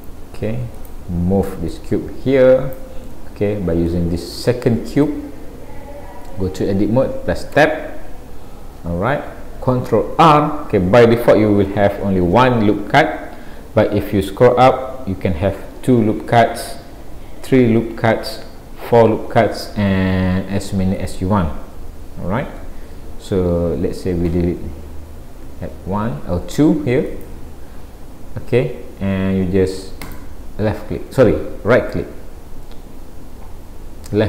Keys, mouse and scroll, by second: 0.8 click, 1.8 click, 3.1 middle click, 4.5 shift+middle click, 5.3-6.1 scroll up 1, 7.6 Tab, 10.2 ctrl+r.